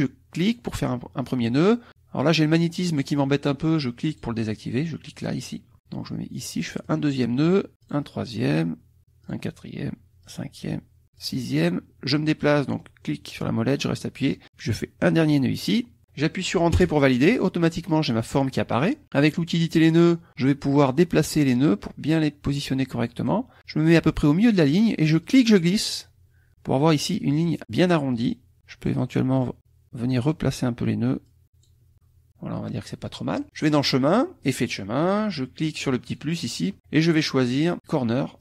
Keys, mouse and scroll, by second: 0.4 click, 4.1 click, 6.8 click, 7.8 click, 9.2 click, 10.2 click, 11.2 click, 12.8-14.2 drag, 15.2 click, 15.7 middle click, 16.7 Return, 20.3 click, 21.4-23.4 drag, 25.2-26.6 drag, 28.1 click, 29.4-30.4 drag, 31.2 click, 31.9-33.2 middle drag, 33.6 click, 34.4 click, 36.0 click.